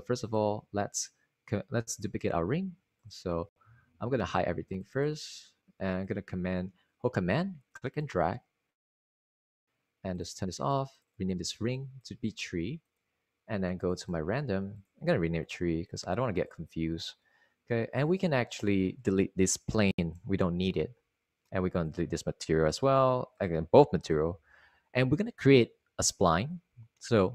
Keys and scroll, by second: 13.3 3, 17.2 3, 21.2 BackSpace, 23.8 Delete, 25.1 Delete.